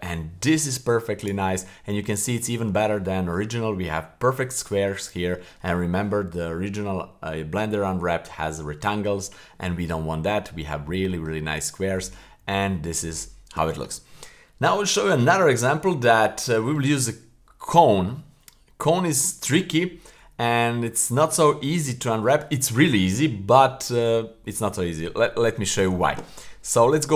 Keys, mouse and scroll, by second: 1.2 right click, 1.6-2.0 middle drag, 2.4 middle click, 2.9-3.5 middle drag, 4.0-4.3 middle drag, 4.7-5.5 middle drag, 9.5-9.9 middle drag, 10.1 middle click, 10.7-11.1 middle drag, 11.3 middle click, 11.8 a.